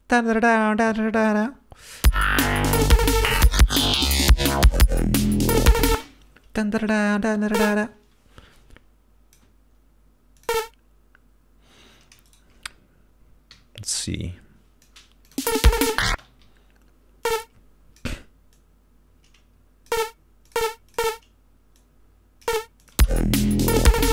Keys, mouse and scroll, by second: 0.0-1.8 drag, 2.0 click, 2.2 space, 4.4 ctrl+scroll up 2, 5.3 d, 6.0 space, 7.7-9.7 drag, 10.5 click, 12.4 shift+right click, 13.7 g, 14.0-15.2 drag, 15.4 click, 15.5 space, 16.3 space, 16.5 d, 17.4 click, 18.7-20.2 drag, 20.6 click, 21.0 click, 21.9 click, 22.9 click, 23.1 space.